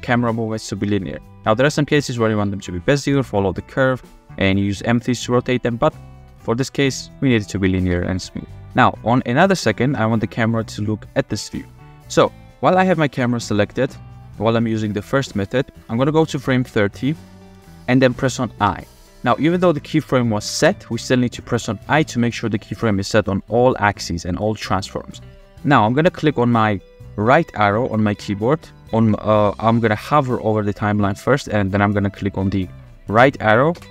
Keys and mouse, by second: 0.2-0.8 middle drag, 0.8 click, 4.9-5.5 drag, 6.1 space, 7.7 space, 7.9 click, 8.4 space, 8.5 space, 9.3 click, 12.7 g, 14.8 click, 16.6 click, 17.0 click, 18.7 i, 33.8 Right.